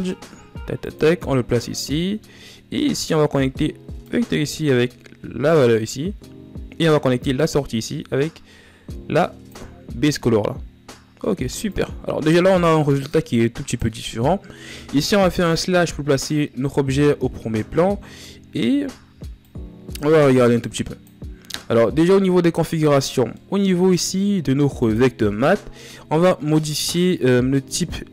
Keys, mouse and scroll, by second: 10.4-10.9 scroll down 6, 13.1 click, 15.3 KP_Divide, 18.0-19.1 scroll up 4, 19.1-20.3 scroll up 1, 20.3 click, 23.1-25.5 middle drag, 25.5-28.1 drag.